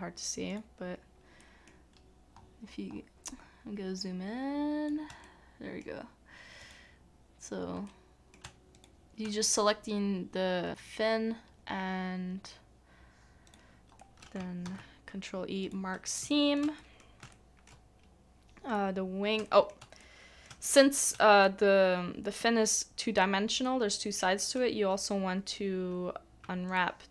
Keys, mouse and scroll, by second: 1.4 middle click, 2.3 scroll up 1, 2.4 scroll down 1, 2.4-2.8 scroll up 1, 2.8-4.5 scroll down 1, 5.2 shift+middle click, 6.6 shift+click, 7.8 middle click, 7.8 shift+click, 8.7 shift+click, 14.0 shift+click, 14.6 ctrl+e, 16.3 shift+middle click, 16.8 shift+middle click, 17.3 shift+middle click, 17.7 scroll down 1, 18.1-19.3 scroll up 1, 19.4 shift+middle click, 20.0 middle click, 20.6 shift+middle click, 26.4 middle click, 26.7 alt+click.